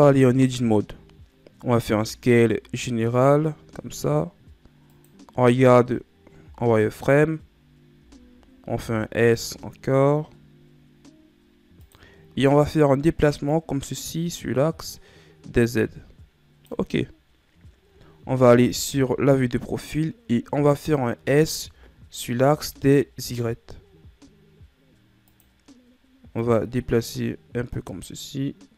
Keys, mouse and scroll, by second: 0.2 Tab, 1.1-2.0 scroll up 2, 2.0 scroll up 1, 2.1 s, 6.6 z, 8.0-8.4 scroll down 3, 9.0 s, 13.8-16.8 drag, 18.9 KP_3, 21.4 s, 26.6-28.7 drag.